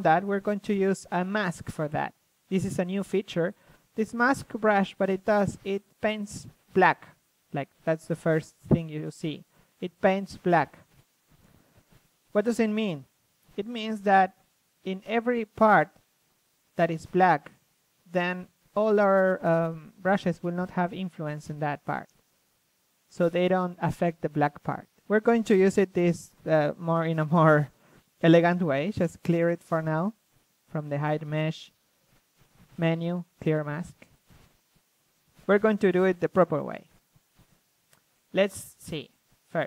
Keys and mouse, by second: 0.5-2.4 drag, 1.7 ctrl+z, 2.4 d, 2.8 f, 4.0-4.7 drag, 5.1 ctrl+z, 7.3 ctrl+z, 7.3-7.7 drag, 11.1 d, 13.3-16.9 drag, 15.0 ctrl+z, 16.9 ctrl+z, 18.3 ctrl+z, 19.7-21.4 drag, 21.4 f, 22.7-23.5 drag, 23.7 d, 23.8 f, 26.0 shift+b, 28.4-30.6 drag, 30.6 ctrl+z, 31.4-35.9 drag, 39.5 click.